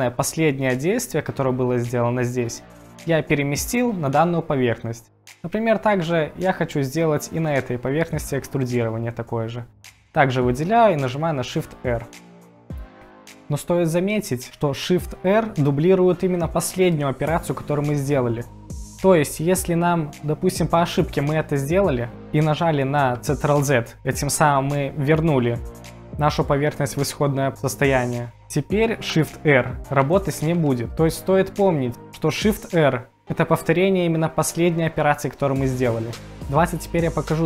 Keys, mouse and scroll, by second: 5.1-6.1 middle drag, 11.5 shift+r, 12.5 middle click, 29.5-30.5 typing.